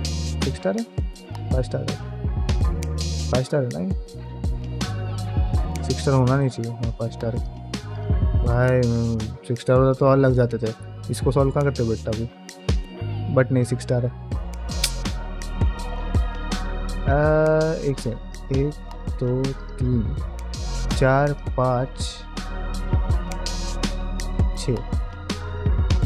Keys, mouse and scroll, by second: 0.2-0.5 scroll down 1, 0.6 shift+middle click, 1.0-1.7 scroll down 1, 1.7 middle click, 1.7-2.6 scroll down 1, 2.6-3.2 scroll up 1, 3.5 middle click, 3.8 g, 6.4-7.8 middle drag, 7.8 click, 7.8 g, 8.0 g, 11.2-13.3 middle drag, 13.3 scroll up 1, 13.3-13.8 scroll down 1, 14.1-17.6 drag, 14.1 scroll down 1, 17.6 middle click, 18.1-19.6 shift+drag, 19.8 middle click, 20.6-22.3 shift+drag, 22.5-24.0 middle drag, 24.6-26.0 middle drag.